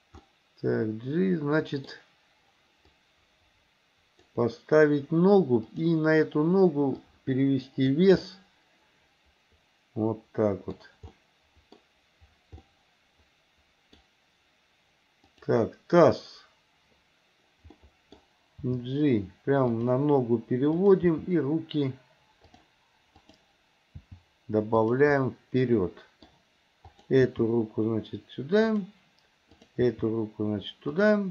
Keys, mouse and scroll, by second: 0.3-2.0 middle drag, 2.9-4.4 drag, 5.7 click, 7.2 click, 8.3-10.8 middle drag, 11.1 scroll up 1, 11.3 middle click, 12.7 scroll up 1, 12.9-14.0 middle drag, 15.3 click, 17.8 middle click, 18.7 g, 20.8 click, 21.1 g, 23.2 click, 23.9 g, 25.2-26.3 middle drag, 27.0 click, 27.3 g, 29.6 click, 30.0 g.